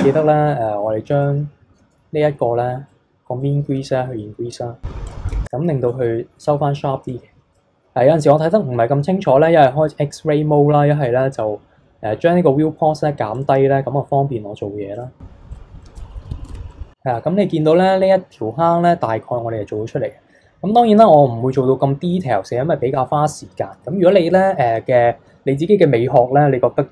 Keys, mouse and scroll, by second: 0.0 alt+click, 1.2-2.9 middle drag, 2.9-5.1 drag, 5.9-10.2 drag, 13.4-15.0 drag, 15.5 click, 15.8 middle click, 16.5 Tab, 16.7-19.5 middle drag.